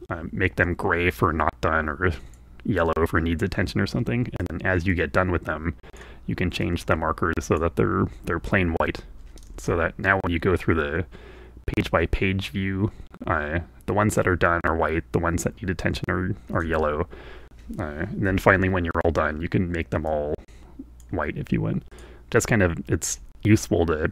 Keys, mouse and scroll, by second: 0.2-2.6 drag, 4.5 click, 5.0-6.2 drag, 6.7-7.8 drag, 9.6 alt+Tab, 16.6 alt+Tab, 17.8 a, 20.1-21.2 drag, 22.0 click.